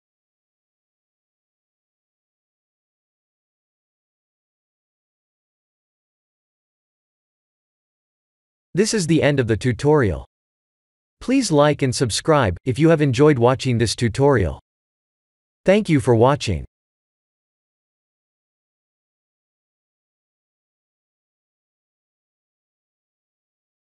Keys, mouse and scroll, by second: 1.5 click, 2.1 click, 2.4 click, 3.5 click, 3.9 ctrl+s, 5.2 click, 5.5 click, 5.9 ctrl+s.